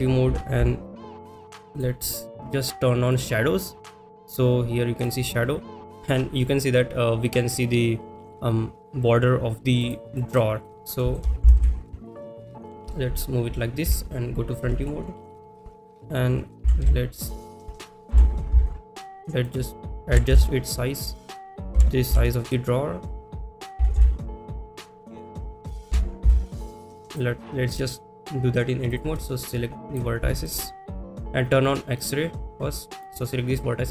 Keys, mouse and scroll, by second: 1.7 click, 1.7 s, 3.1-5.5 drag, 10.2 middle click, 10.6 click, 11.0 middle click, 12.6 click, 12.6 g, 12.6 y, 17.5 click, 17.5 s, 17.5 z, 19.4 click, 19.4 g, 19.4 z, 21.2 click, 21.2 s, 21.2 z, 27.1 click, 27.1 g, 27.1 x, 27.7-28.2 drag, 28.9 click, 29.5 click, 30.3 shift+middle click, 32.0 click, 32.5 click.